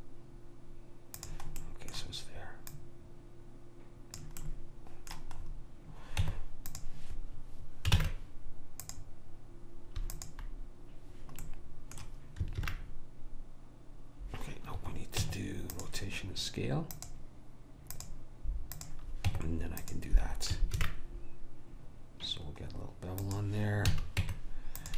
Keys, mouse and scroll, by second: 1.7-2.7 middle drag, 2.7 click, 4.7-6.3 middle drag, 6.3 Tab, 8.0 ctrl+Tab, 10.2 click, 11.5 right click, 12.1 middle click, 12.6 ctrl+b, 15.3 Tab, 19.3 Tab, 20.8 ctrl+b, 24.0 a, 24.3 Tab.